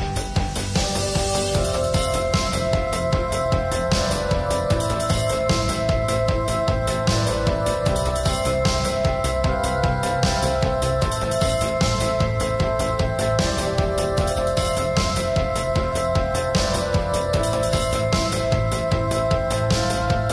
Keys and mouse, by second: 0.5 middle click, 1.6 KP_0, 2.5-3.0 drag, 3.1-3.5 drag, 3.2 KP_0, 3.8-5.2 drag, 5.6 KP_0, 6.0 ctrl+s, 6.1-8.1 middle drag, 6.8 ctrl+s, 7.3 ctrl+s, 8.8 ctrl+s, 9.0-9.5 middle drag, 9.8 click, 10.3 a, 13.4-14.0 drag, 14.1 click, 15.1 s, 15.7-16.4 middle drag, 16.2 s, 16.4 drag, 16.5 middle click, 16.7 drag, 17.0 s, 17.1-17.7 drag, 17.5 KP_7, 17.9-18.7 drag, 18.7 middle drag, 19.1 middle click, 19.5 click, 20.0 KP_1, 20.2 middle click.